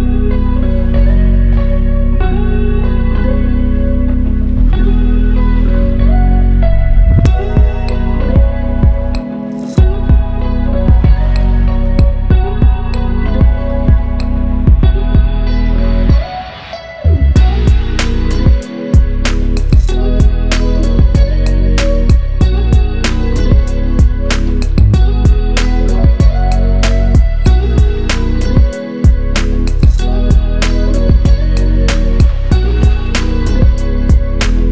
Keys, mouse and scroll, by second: 3.5 click, 3.8 ctrl+z, 4.4-4.8 click, 5.1 ctrl+z, 5.3-6.5 drag, 7.5 scroll down 1, 8.1-8.5 click, 8.9 scroll down 1, 9.3 scroll up 1, 9.9-10.3 drag, 11.7-12.7 scroll down 1, 12.7-13.3 drag, 19.9 scroll up 1, 20.1 scroll down 1, 20.5-22.8 drag, 24.4 ctrl+z, 25.4 click, 26.4 ctrl+Page_Down, 27.0 ctrl+End, 27.8 ctrl+z, 28.1-29.2 drag, 31.7 right click, 32.1 click, 33.6 Right.